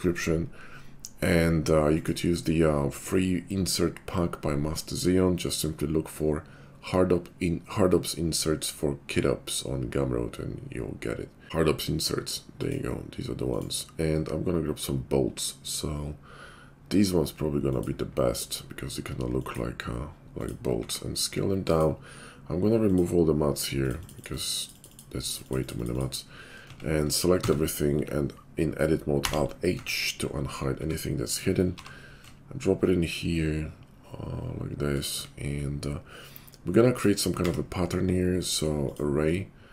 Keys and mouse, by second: 20.8 s, 23.7 middle click, 23.9 click, 26.6 Tab, 27.3 a, 29.2 alt+h, 29.6 Tab, 30.7 middle click, 30.7 s, 31.4-37.0 drag, 31.8 g, 37.3 q.